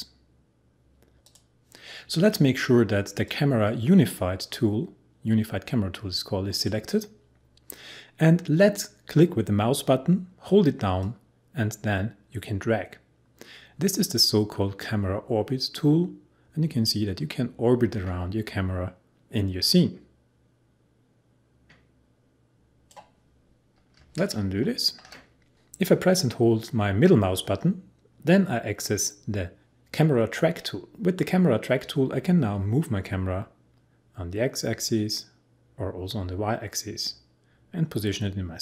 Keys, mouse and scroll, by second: 7.4 click, 7.5 click, 11.0-21.0 drag, 24.4 ctrl+z, 27.4-37.4 middle drag.